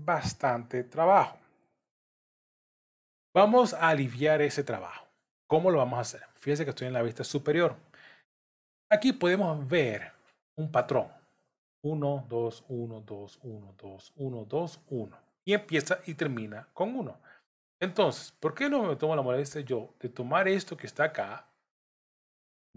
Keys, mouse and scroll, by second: 3.3 KP_7, 18.6 click.